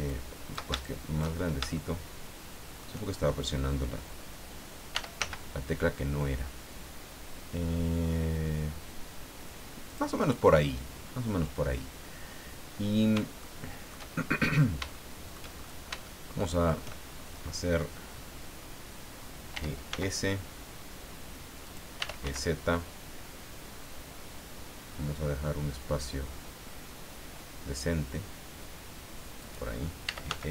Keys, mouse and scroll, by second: 0.1 shift+click, 0.8 shift+click, 1.7-3.0 shift+middle drag, 4.9 e, 5.2 z, 9.9 click, 13.4 shift+middle click, 14.2-14.7 shift+scroll up 1, 14.9 shift+middle click, 15.6-16.0 shift+scroll up 1, 16.0 shift+middle click, 19.5 e, 19.9 s, 21.6 click, 21.7-22.7 typing, 29.4 click, 29.8-30.5 typing.